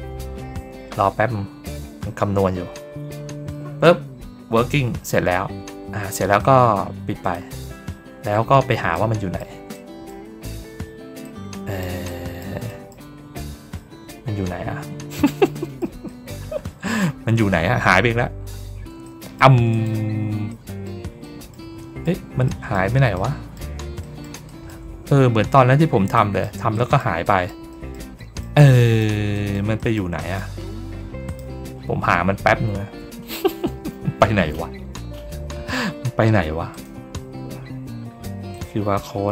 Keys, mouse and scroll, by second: 7.1 click, 7.8 ctrl+middle click, 8.3 ctrl+middle click, 8.8 middle click, 9.6 middle click, 11.1 middle click, 11.9 middle click, 12.6 ctrl+middle click, 13.1 ctrl+middle click, 13.1-13.5 ctrl+scroll up 2, 13.5 ctrl+middle click, 14.8 ctrl+middle click, 14.8 ctrl+scroll down 1, 15.4 middle click, 16.0 middle click, 16.4 ctrl+middle click, 18.1 ctrl+middle click, 18.5 ctrl+middle click, 18.9 middle click, 19.6 click, 20.4 middle click, 21.1 middle click, 21.7 middle click, 22.3 middle click, 23.0 middle click, 23.9 middle click, 24.4 middle click, 25.1 ctrl+scroll up 1, 25.4 ctrl+scroll down 1, 26.0 middle click, 26.6 middle click, 27.1 middle click, 27.6 middle click, 28.1 middle click, 28.6 middle click, 29.2 middle click, 29.7 middle click, 30.1 middle click, 31.1 click, 36.6 click, 38.4 click.